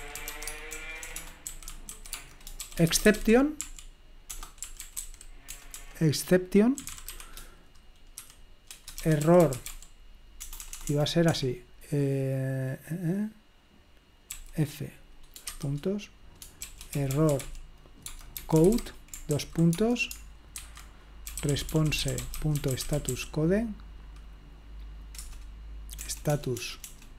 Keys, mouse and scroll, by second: 0.0-10.8 typing, 14.3 typing, 16.9-23.6 typing, 25.2 Return, 26.0 BackSpace, 26.3 BackSpace, 26.6 BackSpace, 26.8 BackSpace.